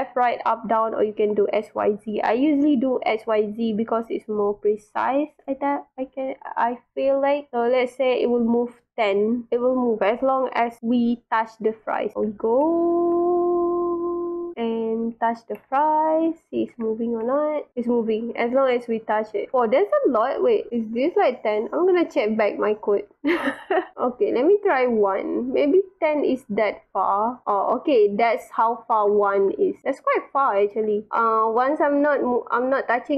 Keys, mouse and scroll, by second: 5.2 click, 6.6 click, 8.3 click, 8.9 click, 11.6 click, 12.1 click, 12.1 w, 12.7 space, 14.2-15.4 drag, 15.1 space, 15.8-20.7 drag, 16.6 w, 16.7 space, 18.8 a, 19.8 w, 20.5 a, 23.0 click, 24.0 click, 24.5 click, 25.3 click, 26.6 click, 27.4-33.1 drag, 28.7 w, 29.4 s, 30.3 w, 31.1 w.